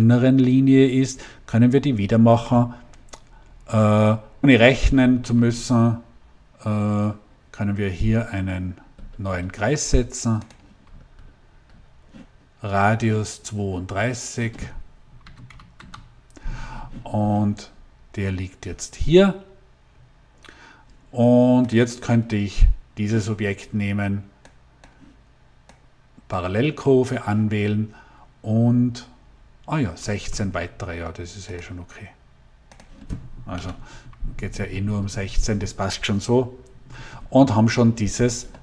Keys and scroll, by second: 15.1 3, 15.4 2, 15.7 Return, 33.4 Delete.